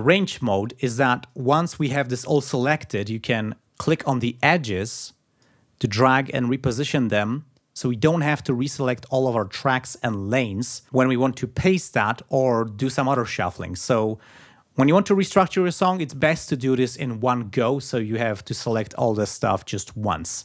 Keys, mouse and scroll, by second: 3.5-5.3 drag, 6.0-7.1 drag.